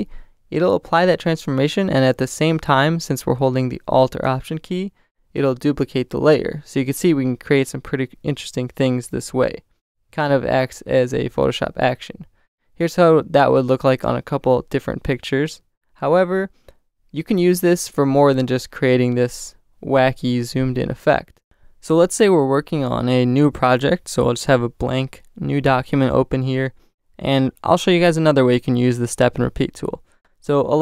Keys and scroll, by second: 1.0 alt+shift+super+t, 4.4 alt+shift+super+t.